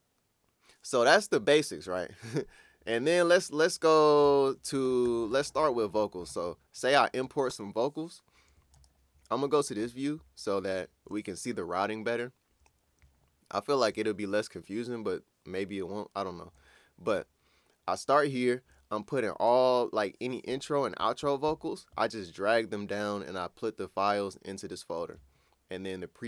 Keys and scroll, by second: 4.2 super+`.